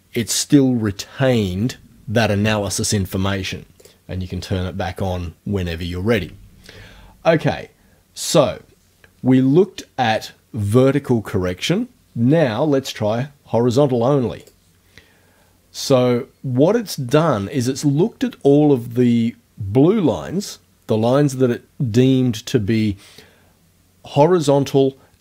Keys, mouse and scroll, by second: 3.8 click, 14.4 click.